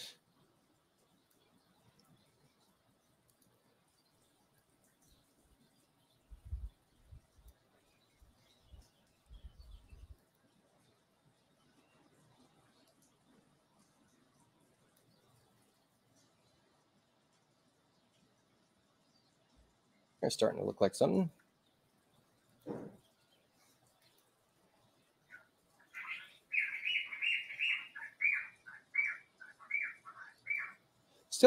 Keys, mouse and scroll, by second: 3.2 click, 4.5-7.4 drag, 10.1 click, 12.8 click, 13.7-14.9 drag, 17.8 space, 20.1 click, 22.4 click, 23.9 click, 30.3 click.